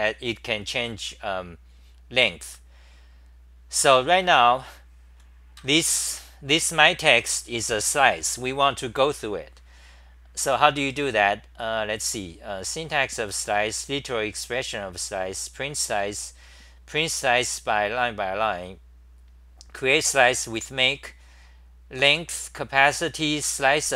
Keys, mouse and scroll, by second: 5.6 ctrl+g, 5.8 h, 6.1 9.